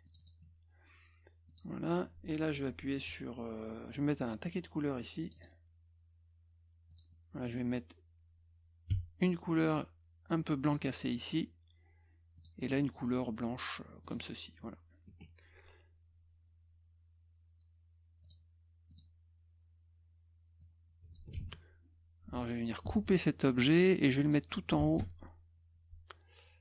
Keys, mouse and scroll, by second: 0.1 click, 0.2 click, 1.5 click, 5.2 click, 5.4 click, 6.9 click, 8.9 d, 10.7 click, 12.4 click, 14.1 click, 15.1 F1, 18.2 click, 18.9 click, 20.6-21.2 drag, 21.4 ctrl+z, 22.8 ctrl+x, 24.3 click, 25.0 ctrl+alt+v.